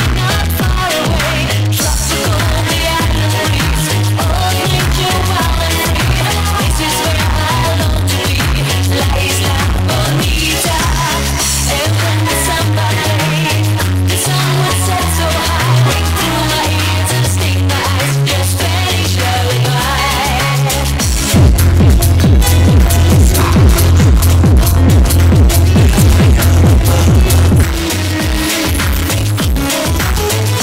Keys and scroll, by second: 28.2 Page_Down.